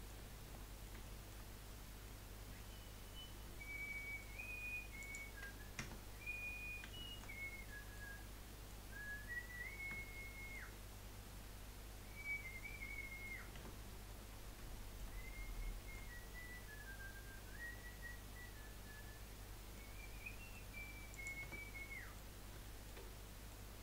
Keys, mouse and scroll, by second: 0.3 scroll up 1, 0.5-1.7 middle drag, 1.7-2.0 scroll up 1, 2.0-4.3 middle drag, 4.3-5.0 scroll up 1, 5.0 click, 5.8 Tab, 6.3-7.0 scroll up 2, 7.0-8.2 shift+middle drag, 8.2-8.5 scroll down 3, 8.5-11.6 middle drag, 11.6-12.7 scroll down 2, 12.7 middle click, 13.5 Tab, 14.1-14.7 scroll down 1, 14.7 shift+middle click, 15.2 scroll up 3, 15.6-16.2 shift+middle drag, 16.2 scroll up 3, 17.9-18.4 scroll down 3, 18.4-19.9 middle drag, 19.9-20.3 scroll up 1, 20.3 middle click, 20.7-21.1 scroll up 1, 21.1 click, 21.4 Tab, 21.7-23.7 middle drag, 23.7-23.8 scroll down 1.